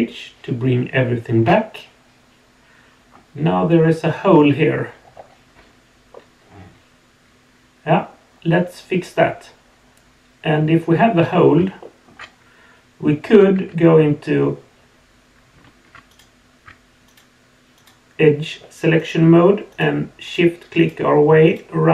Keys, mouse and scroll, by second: 1.3 alt+h, 2.9-4.3 scroll up 4, 4.3 scroll down 2, 5.1 scroll up 1, 6.1-8.0 middle drag, 11.8 shift+middle click, 13.5 2, 16.1 click, 16.6 shift+right click, 17.0 shift+click, 17.7 shift+click, 19.0 shift+click, 19.7 shift+click, 20.2 shift+click, 20.8 shift+click, 21.4 shift+click.